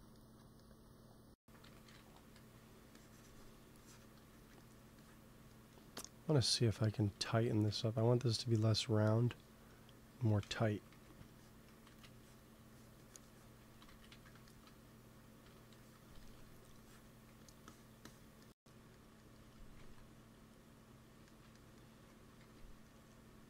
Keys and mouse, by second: 1.5 p, 2.3 f, 2.8 click, 4.3-7.4 drag, 7.4 g, 7.6 f, 8.1-10.3 drag, 10.3 shift+c, 10.6 click, 10.8 f, 11.3-14.7 drag, 11.8 ctrl+z, 13.9 ctrl+z, 14.1 ctrl+z, 15.3 p, 15.7 click, 17.2 f, 18.6-19.7 drag, 19.7 ctrl+s, 22.1 g, 22.3 f, 23.2-23.4 drag.